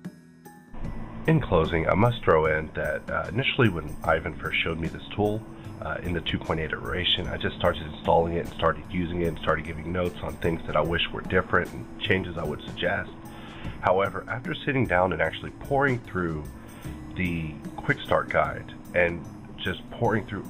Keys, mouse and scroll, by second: 10.1 click, 10.1 scroll down 2, 10.9-12.9 scroll down 2, 13.1 scroll up 1, 15.2 click, 16.0 click, 17.6 click.